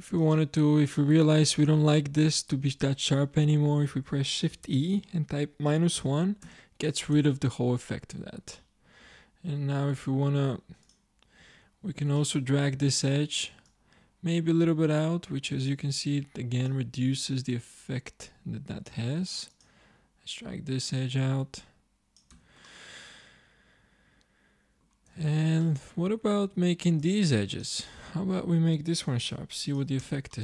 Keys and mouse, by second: 0.2-2.1 middle drag, 4.6 shift+e, 7.2 Tab, 9.1 Tab, 12.2 middle click, 14.1-15.6 drag, 17.1-18.6 drag, 20.0 click, 22.3 Tab, 25.1 Tab, 26.6 ctrl+Tab, 29.1 shift+e, 30.0 Tab.